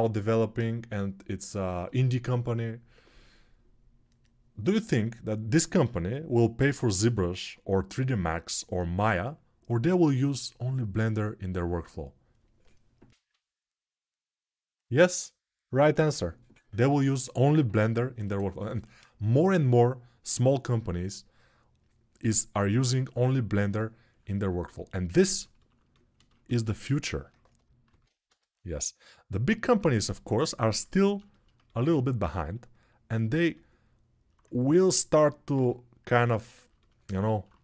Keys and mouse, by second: 24.7-26.8 ctrl+alt+right drag, 27.7 alt+q, 28.0 g, 30.8-37.6 alt+shift+drag.